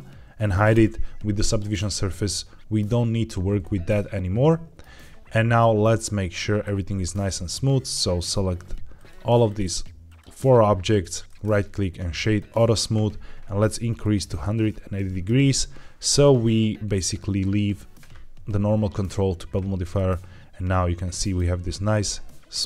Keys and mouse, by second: 0.6 h, 3.5 middle click, 4.4-4.7 shift+middle drag, 5.5 shift+middle drag, 10.0 shift+click, 11.2-12.5 right drag, 14.0-15.2 drag, 19.9-21.2 middle drag, 21.8-22.6 middle drag.